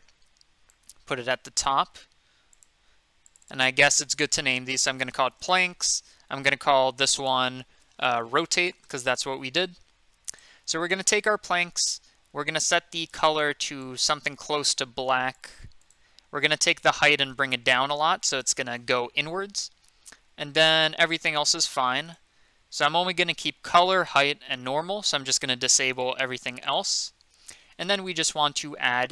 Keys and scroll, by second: 4.4-5.9 typing, 7.8-9.2 typing.